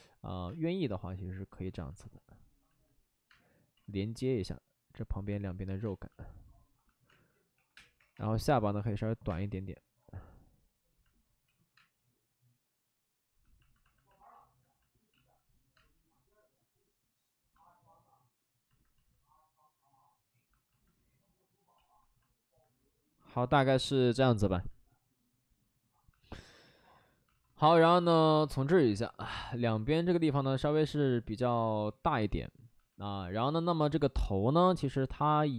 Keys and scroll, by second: 0.4 space, 3.3 space, 3.7 ctrl+z, 5.8 space, 7.0-8.1 typing, 9.2 space, 11.4 ctrl+z, 11.7 space, 15.1 ctrl+z, 15.7 space, 17.6 ctrl+z, 17.7 space, 21.0 space, 21.7 ctrl+z, 26.2-27.3 typing, 27.9 alt+s, 28.8 3.